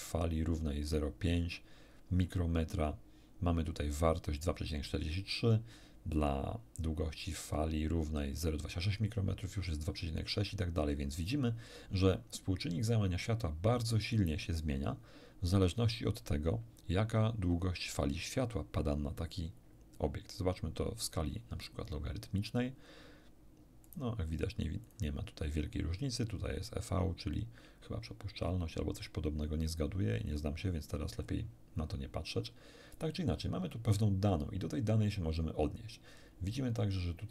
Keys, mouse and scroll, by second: 21.0 click, 23.8 click, 24.8 click, 30.2 click, 31.2 scroll up 1.